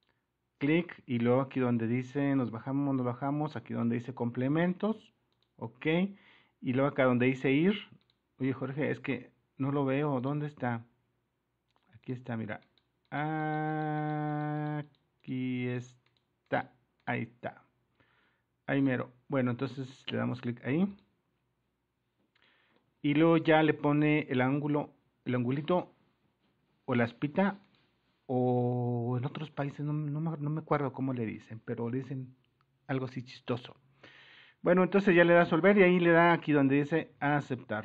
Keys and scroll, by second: 3.8 super++, 8.2 super+-, 35.6 super+-.